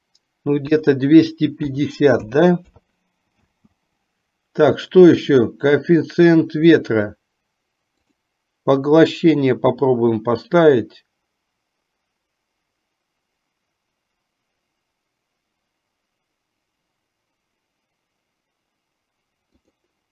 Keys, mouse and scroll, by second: 3.6 space, 8.3 click, 19.9 click.